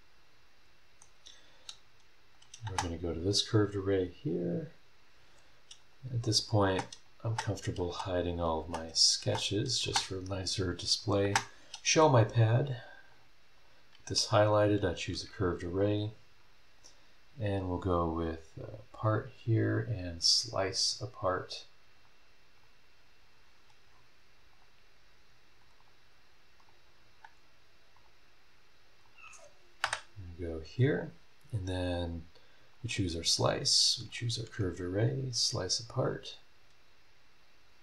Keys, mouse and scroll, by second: 1.9 scroll down 1, 2.3 click, 2.6 space, 4.3 click, 5.8 click, 6.3 click, 6.6-9.8 typing, 6.9 click, 7.5 click, 8.3 click, 9.0 click, 9.6 click, 11.0 click, 11.2 space, 13.1 click, 13.6 click, 14.7 ctrl+click, 16.7 click, 18.6 click, 21.9 click, 22.6 click, 23.9 scroll down 1, 24.5 click, 25.8 click, 26.6 click, 26.9 scroll down 2, 27.9 click, 29.0 click, 29.8 Delete, 32.7 click, 34.1 ctrl+click, 35.3 click.